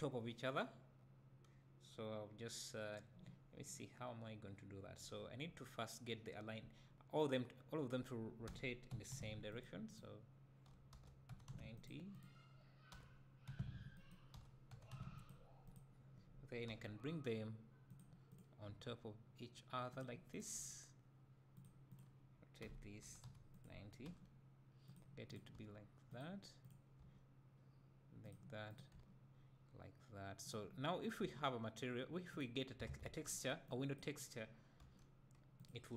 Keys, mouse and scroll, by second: 8.8 r, 9.6 click, 11.3 r, 12.2 click, 14.0 r, 15.8 click, 17.2 g, 18.3 click, 18.7 g, 20.2 click, 20.6 g, 22.0 click, 22.7 r, 23.6 click, 24.1 g, 25.5 click, 25.6 g, 26.9 click, 27.0 g, 28.4 click, 29.0 g, 31.3 g, 32.9 alt+a, 33.9 b, 34.8 g.